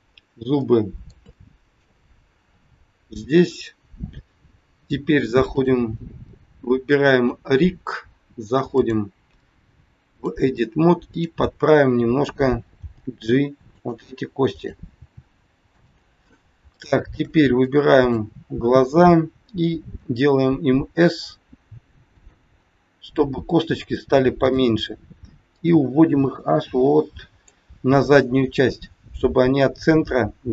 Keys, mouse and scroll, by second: 0.6 middle click, 1.3 shift+middle click, 2.4 KP_3, 5.5 click, 7.2 click, 11.0 click, 12.7 g, 14.6 click, 14.9 g, 16.7 shift+middle click, 17.7 click, 20.0 s, 22.6 scroll up 4, 24.4 click, 25.4 click.